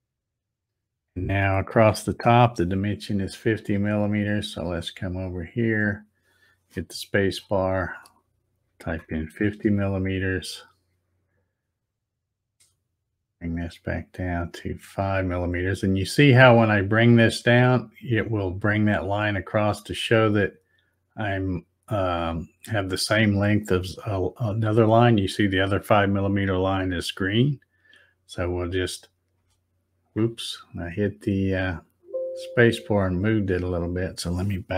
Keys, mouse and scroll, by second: 4.2-7.3 drag, 7.2 space, 13.5-30.1 drag, 29.4 space, 31.8 click.